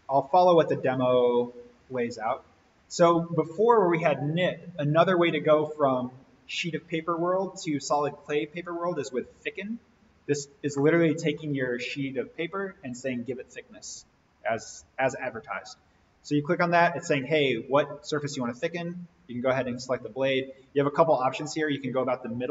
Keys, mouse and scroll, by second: 10.7-11.3 middle drag, 14.4 click, 18.5 click, 21.6 click.